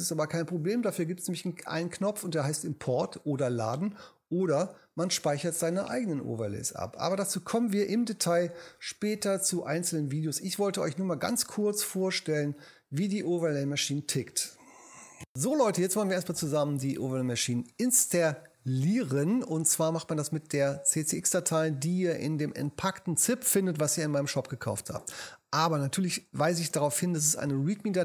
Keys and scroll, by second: 26.7 space.